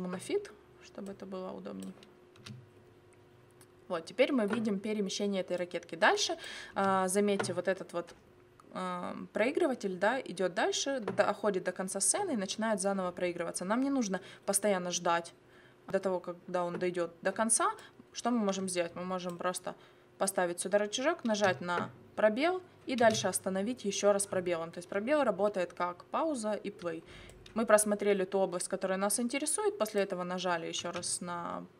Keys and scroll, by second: 2.4 space, 6.7 space, 21.3 space, 23.0 space.